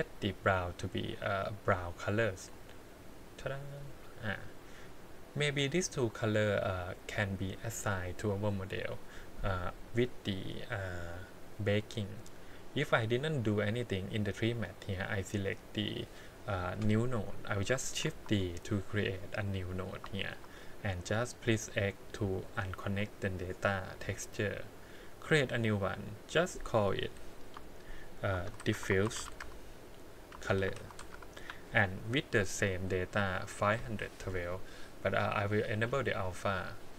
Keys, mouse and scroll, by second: 0.4 click, 1.2 click, 4.8 click, 5.3 click, 6.1 click, 6.5 click, 13.8 click, 15.1 click, 16.2 click, 18.1 shift+d, 20.2 shift+middle click, 21.9 click, 25.2-27.6 drag, 28.9 f, 33.5-36.9 drag.